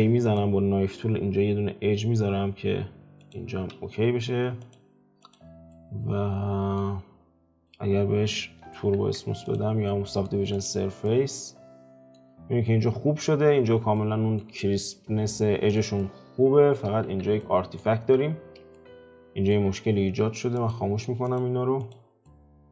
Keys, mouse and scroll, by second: 4.6 click, 5.2 click, 5.7-7.0 middle drag, 7.0-7.6 scroll down 3, 7.6 click, 9.0 ctrl+3, 9.4 click, 9.9-10.5 middle drag, 10.5 click, 11.0-17.0 middle drag, 17.0 alt+q, 17.4-18.0 middle drag, 18.0 Tab, 18.7-20.7 shift+middle drag, 20.7-21.3 drag, 21.8 click, 22.2-22.7 middle drag.